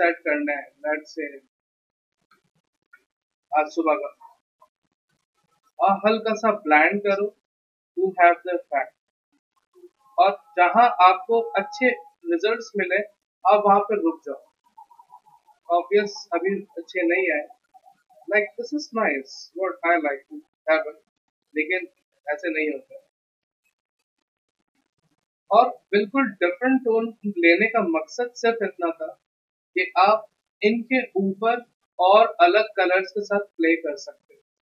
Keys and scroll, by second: 2.8 alt+BackSpace, 3.4 ctrl+d, 3.7 v.